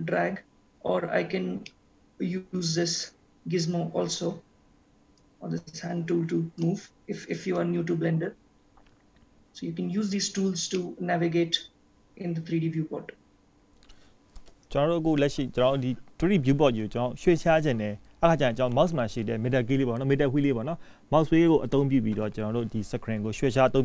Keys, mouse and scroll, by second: 1.3-2.0 scroll down 1, 2.0 middle click, 5.0 scroll down 1, 5.6 click, 10.9 middle click, 14.9 click, 17.4-17.9 scroll up 1, 21.0 middle click.